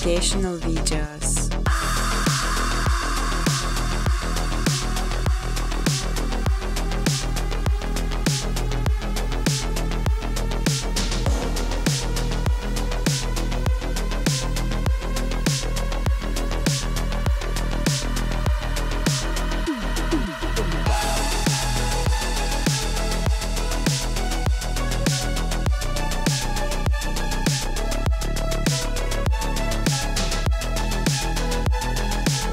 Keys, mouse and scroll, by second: 1.9-2.7 typing, 4.6 click, 5.2 typing, 5.5 click, 6.4 click, 7.9 click, 9.0 click, 9.9 click, 11.8-12.3 typing, 13.3 Tab, 14.3 0, 17.7 click, 22.1 alt+click, 22.5-24.1 typing, 24.9 click.